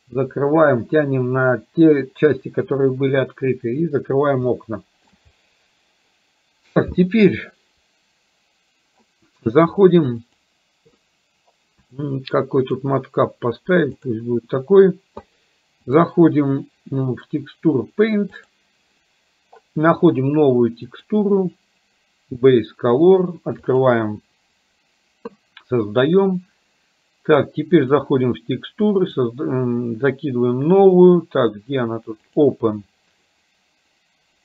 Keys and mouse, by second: 4.6 shift+middle click, 10.3 click, 12.1-14.3 drag, 15.9-18.6 drag, 20.9-23.9 drag, 27.9 click, 29.2 click, 32.3 click.